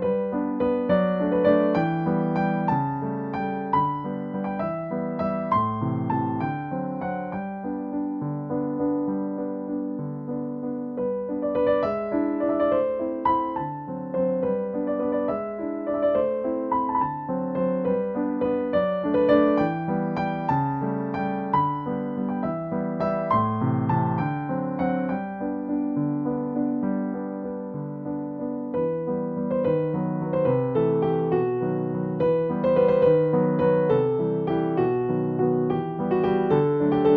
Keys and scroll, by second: 3.4 scroll down 1, 3.7 scroll up 1, 4.4-5.0 scroll up 1, 7.3 scroll down 1, 7.7 scroll up 1, 12.2-12.7 scroll down 1, 12.7 scroll up 1, 13.4 scroll down 1, 13.7-14.0 scroll up 1, 21.2-21.7 scroll down 1, 21.7 scroll up 1, 21.9 scroll down 1, 22.4 scroll up 1, 25.1 scroll down 1, 25.4 scroll up 1, 28.5 scroll down 1, 29.0 scroll up 1, 31.6 scroll down 1, 31.9-32.4 scroll up 1, 32.6 scroll down 1, 32.8 scroll up 1, 34.3 scroll down 1, 35.2 scroll up 1, 37.0 scroll down 1.